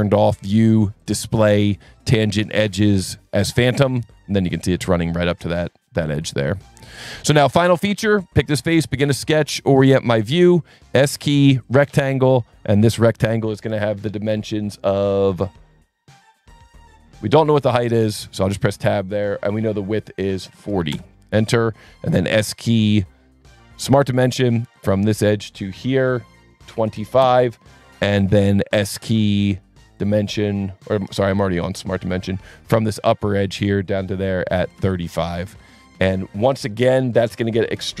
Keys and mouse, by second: 0.1 click, 1.0 click, 3.6 click, 4.1 click, 7.4 click, 8.9 n, 10.1 ctrl+8, 10.7 s, 11.6 click, 12.9 click, 18.7 Tab, 20.5 KP_4, 20.6 KP_0, 21.0 KP_Enter, 21.9 s, 22.7 click, 23.9 click, 24.7 click, 26.1 click, 26.8 KP_2, 26.9 KP_5, 27.2 KP_Enter, 29.9 click, 33.3 click, 34.0 click, 34.5 KP_3, 34.6 KP_5, 34.9 KP_Enter, 37.7 s.